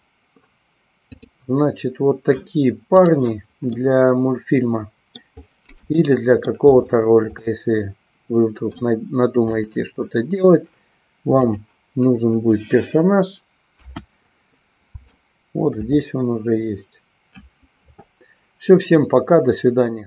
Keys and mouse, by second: 3.0 click, 3.9-5.2 middle drag, 6.1 shift+middle click, 7.6-9.0 middle drag, 9.6 click, 11.5 click, 13.9 KP_1, 15.2 shift+middle click.